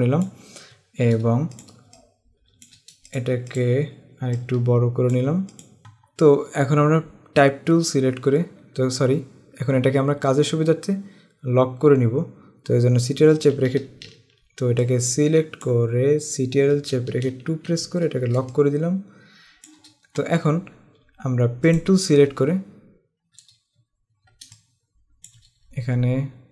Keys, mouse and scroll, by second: 0.0 click, 1.7 click, 1.9 space, 2.0 click, 2.4 space, 3.1 click, 5.6 click, 9.9-10.3 scroll down 1, 10.7 scroll up 1, 14.9 click, 18.5 space, 18.6 click, 21.9 click, 24.0-24.6 alt+scroll up 2, 24.6 click, 25.1 space.